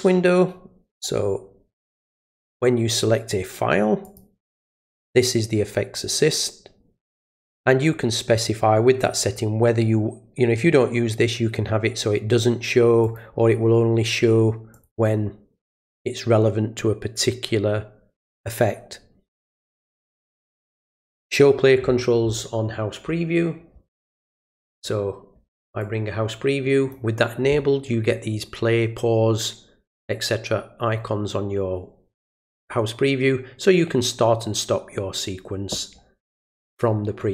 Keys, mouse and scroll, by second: 2.0 click, 4.0 click, 13.0 click, 14.7 click, 24.6 click, 25.8-26.9 ctrl+drag, 36.7-37.3 ctrl+drag.